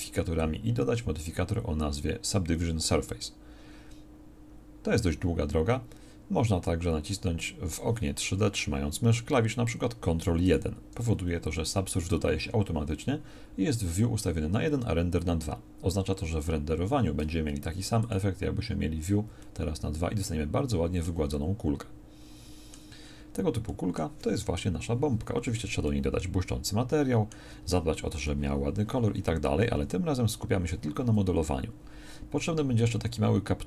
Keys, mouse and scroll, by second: 10.4 ctrl+1, 24.7 KP_1.